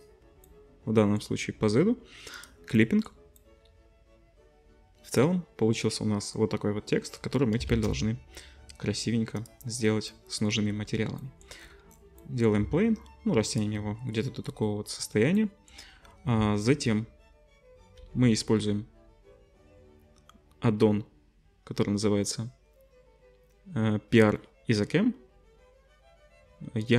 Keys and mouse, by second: 0.0-14.0 drag, 2.3 middle click, 2.3 right click, 7.7 shift+a, 12.6 s, 14.0-15.4 drag, 18.0 n.